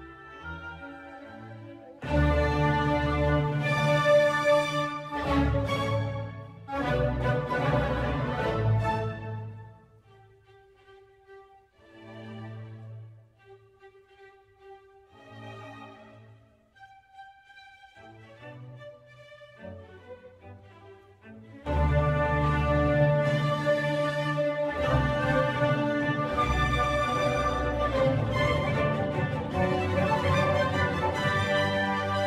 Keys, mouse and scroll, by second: 3.0 click, 4.1 click, 7.2 n, 8.1 click, 9.1 n, 10.4 middle click, 11.1 scroll down 3, 12.1 click, 12.8 click, 14.9-15.6 drag, 15.6-17.0 scroll down 3, 17.0 click, 22.8-24.4 middle drag, 24.4 scroll up 1, 25.5 click, 28.1 click, 31.4 click.